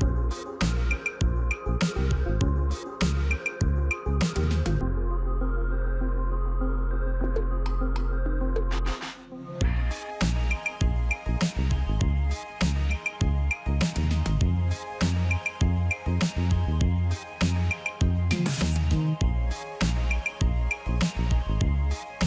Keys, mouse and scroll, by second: 5.6-7.5 typing, 12.8 ].